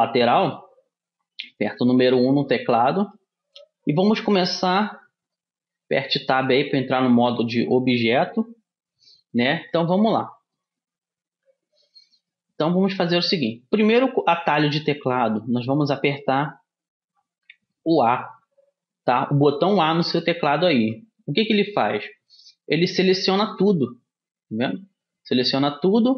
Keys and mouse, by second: 0.0-5.9 middle drag, 5.9 Tab, 9.7 s, 11.4 a, 12.4-20.9 middle drag, 20.9 a, 23.6 middle click.